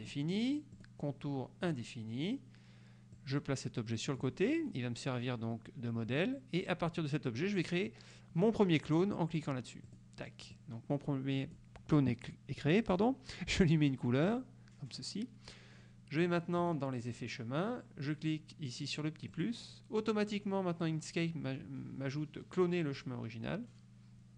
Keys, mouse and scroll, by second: 0.1 click, 0.9 click, 1.8 click, 3.3-4.5 drag, 4.6 click, 10.0 click, 10.7-11.9 drag, 14.4 click, 16.7 click, 19.4 click.